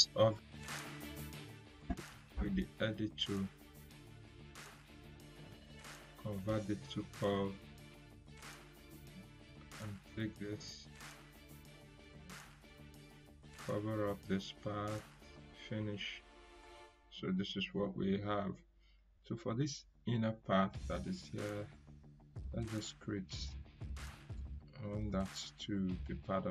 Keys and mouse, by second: 0.7 click, 6.1 ctrl+q, 8.7-13.0 drag, 21.7-26.5 drag.